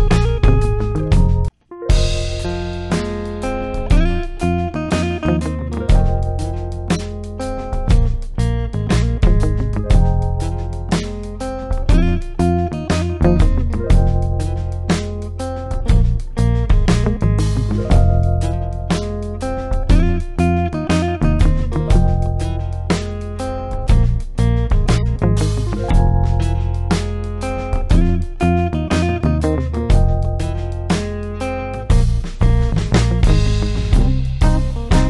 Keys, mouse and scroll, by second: 1.9 click, 2.7 shift+click, 4.8 ctrl+g, 6.3 click, 9.6-12.0 typing, 13.8 click, 16.9-18.5 drag, 21.1-24.7 drag.